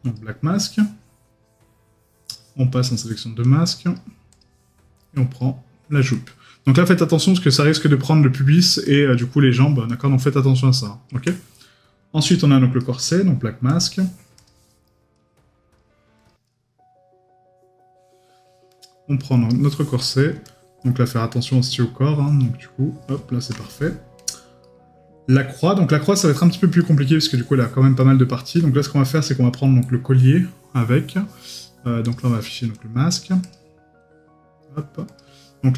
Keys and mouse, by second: 12.8 right click, 24.6 right click, 26.8 right click, 27.5 middle click, 28.0 right click.